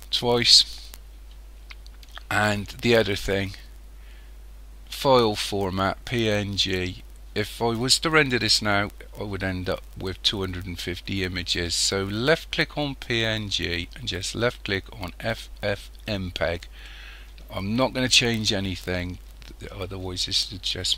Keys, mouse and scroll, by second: 0.0-16.9 drag.